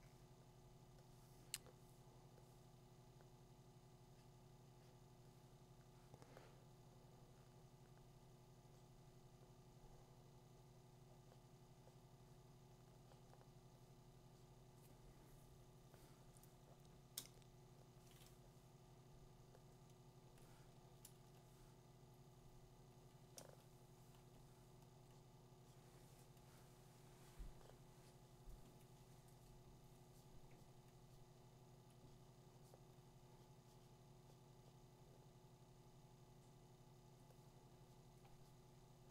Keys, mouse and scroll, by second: 20.4 click, 22.9 click, 23.9 ], 24.3-25.0 ], 25.9 ], 29.5 click, 29.9 click, 31.9 click, 33.9 click, 37.0 click.